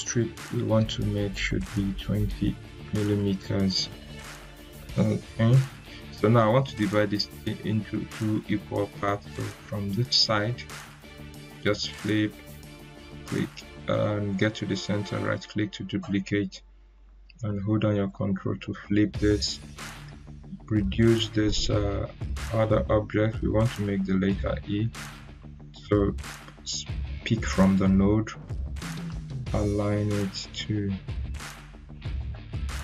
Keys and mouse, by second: 1.5-2.4 typing, 2.7 Return, 4.7-11.2 drag, 11.2-12.7 drag, 15.0 right click, 18.0-18.9 ctrl+drag, 19.9-20.8 click, 21.2 ctrl+z, 22.4-24.6 drag.